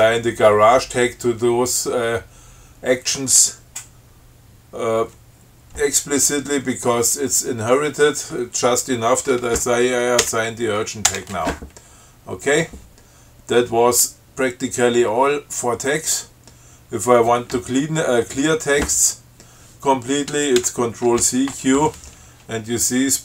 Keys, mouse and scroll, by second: 10.4 u, 11.2 Return, 20.7 ctrl+c, 21.2 ctrl+q.